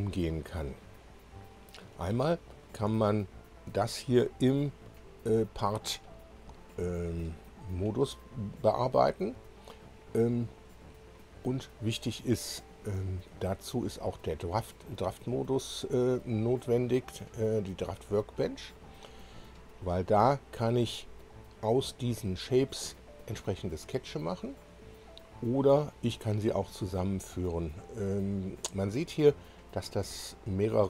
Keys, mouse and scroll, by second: 1.8 click, 3.1 shift+click, 3.9 shift+click, 12.7 click, 15.5 click, 19.2-21.2 drag, 30.1 scroll up 1.